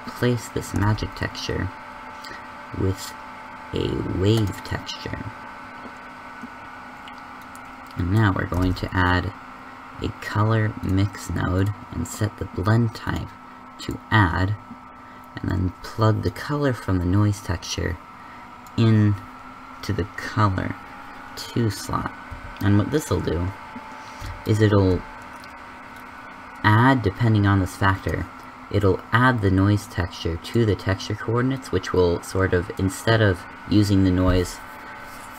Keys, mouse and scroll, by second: 0.9 shift+s, 8.7 shift+a, 22.2 g.